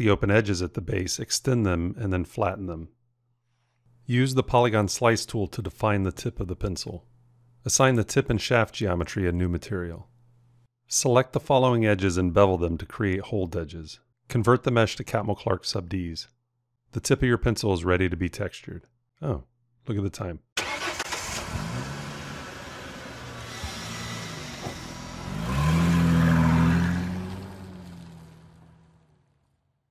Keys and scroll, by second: 0.8 r, 8.0 m, 12.5 b, 14.1 shift+Tab.